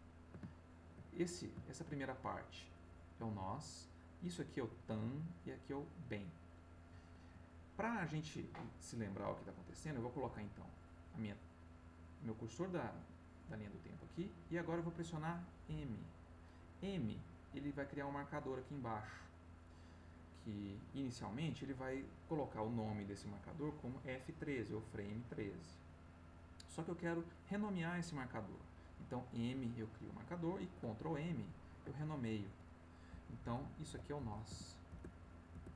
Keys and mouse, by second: 0.5 ctrl+middle click, 1.2 ctrl+middle click, 2.2 ctrl+middle click, 6.5 middle click, 7.4 middle click, 9.8-13.5 drag, 15.6 m, 31.3 ctrl+m, 33.3 shift+n, 34.2 o, 34.5 s, 34.9 Return.